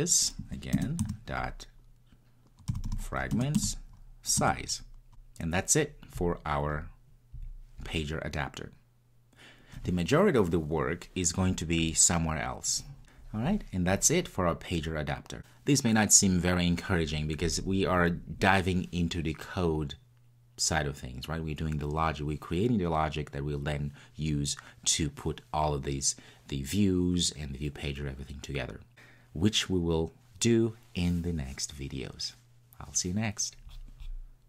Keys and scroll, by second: 0.8 Return, 3.4 Return.